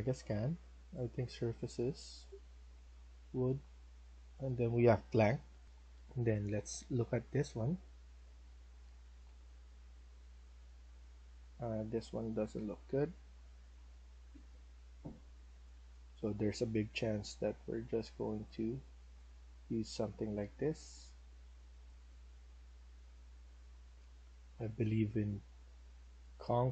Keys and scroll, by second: 5.6 F1, 11.6 s, 12.6 ctrl+z.